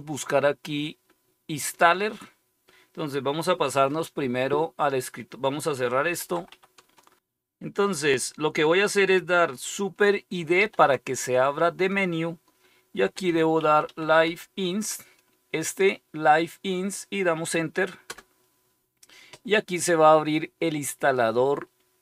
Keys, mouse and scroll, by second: 4.1 Escape, 5.6-6.9 typing, 10.5 super+d, 12.6-14.7 typing, 18.0 typing.